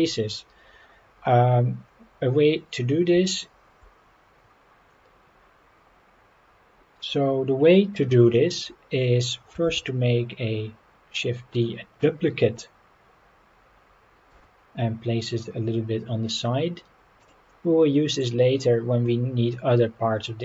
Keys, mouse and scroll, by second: 0.7-1.8 scroll up 2, 1.8 scroll down 1, 9.6 shift+d, 14.3 x, 17.2 click, 18.1 click.